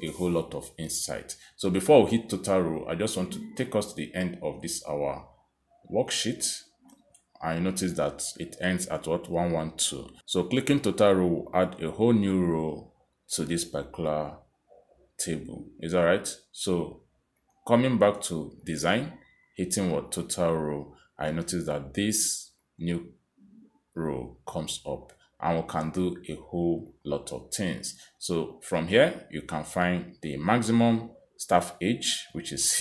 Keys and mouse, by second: 4.3 click, 5.3 click, 9.9 click, 11.3 click, 12.2 click, 16.4 click, 18.4 click, 20.0 click, 22.2 click, 23.6 click, 25.2 click, 25.9 click, 28.2 click, 31.2 click.